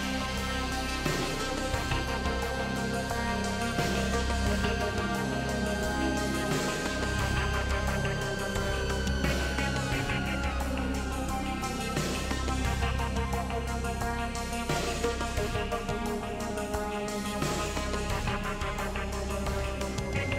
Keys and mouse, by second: 5.4 3, 5.8 alt+z, 6.3 click, 7.5 KP_Decimal, 8.0 alt+z, 10.6 i, 19.8 r.